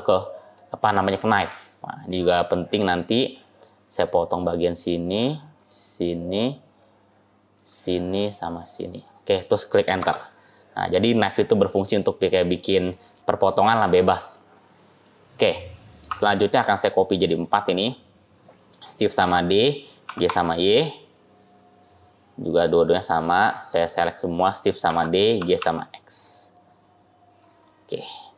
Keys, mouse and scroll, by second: 11.0 click, 11.5 click, 13.4-13.8 scroll up 1, 13.8 scroll down 2, 14.2-14.9 scroll down 10, 14.9 click, 16.0 Tab, 16.4 click, 17.5 click, 19.1 shift+d, 22.5 click, 23.1 click, 23.8 shift+click, 23.9 shift+click, 24.7 shift+d, 27.5 middle click.